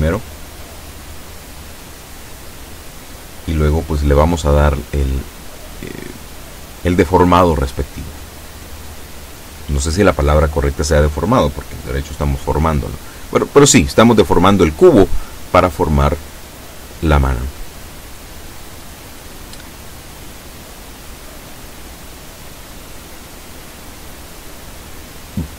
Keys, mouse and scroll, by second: 13.7-15.1 drag.